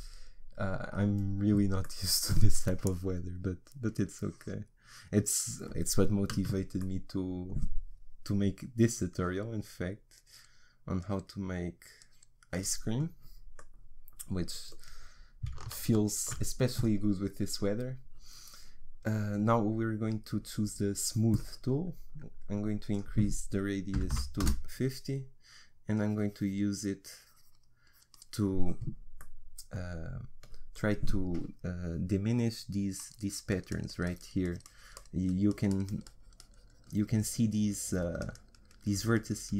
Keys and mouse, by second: 16.8-21.5 drag, 22.9-30.1 drag, 33.0-39.5 drag.